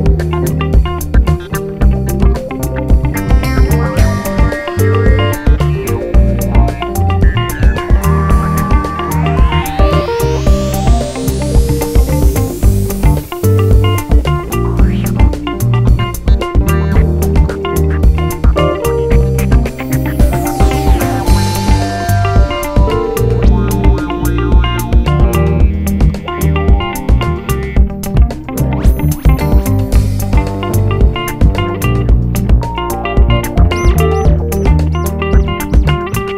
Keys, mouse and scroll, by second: 0.0 g, 0.4 r, 0.9 click, 1.7 g, 3.5 Tab, 3.6 `, 5.6-6.0 scroll down 2, 6.0 KP_1, 6.9 shift+d, 7.8 h, 8.1 click, 13.7-16.4 right drag, 14.7-15.5 scroll up 2, 16.2 2, 16.4 click, 16.7 shift+click, 16.8 f, 17.7 `, 19.4-23.9 typing, 20.0 click, 20.7 click, 21.4 click, 21.6 shift+click, 21.8 click, 22.0 shift+click, 22.7 Tab, 22.9 scroll down 1, 23.6 scroll up 2, 23.8 Tab, 25.5 Tab, 25.9-28.5 typing, 28.7 scroll up 1, 28.9 click, 29.3 shift+click, 31.3 f, 31.8 scroll up 1, 32.5 click, 32.9 g, 33.2 click, 33.5 g, 34.5 click, 34.7 2, 34.9 click, 35.1 shift+click, 35.2 f, 35.8 click, 36.2 g.